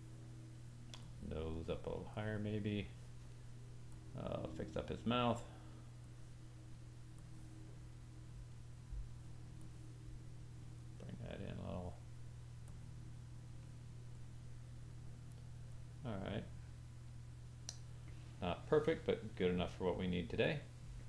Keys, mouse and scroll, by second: 1.0 click, 2.1 click, 3.9 click, 5.1 click, 6.0 click, 7.2 click, 9.6 click, 10.8 click, 12.7 click, 14.2 click, 15.7 click.